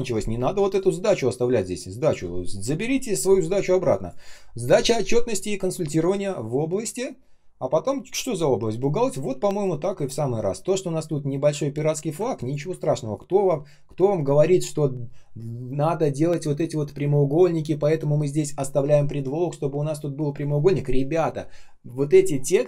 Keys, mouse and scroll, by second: 12.4 ctrl+click.